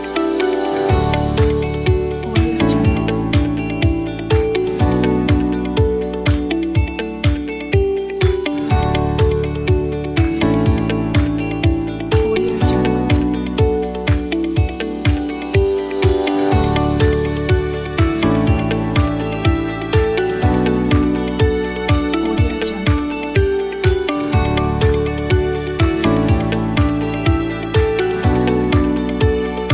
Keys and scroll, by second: 24.3 x.